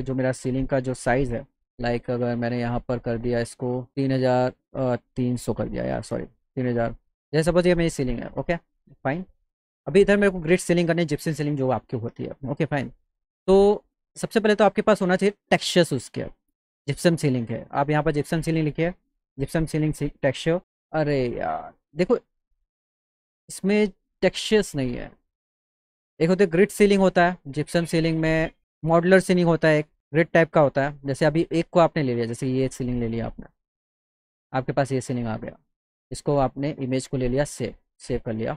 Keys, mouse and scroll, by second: 1.5 alt+w, 2.3 click, 3.7 click, 6.1 KP_0, 6.7 Tab, 7.8 click, 8.3 click, 14.0 click, 16.7 click, 18.1 click, 22.3 click, 22.4 middle click, 22.4 scroll down 1, 27.4 click, 28.2 click, 30.5 scroll down 2, 31.1 click, 34.9 click, 36.4 click.